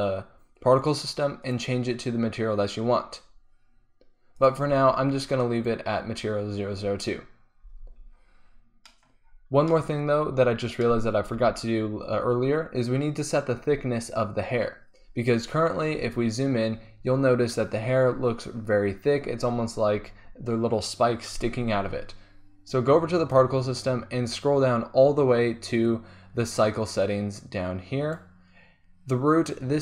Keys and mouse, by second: 1.4-7.5 drag, 7.9 z, 8.2 click, 9.8 click, 11.4 shift+z, 16.0 middle click, 18.1 click, 24.0-25.5 drag, 26.4-29.8 drag.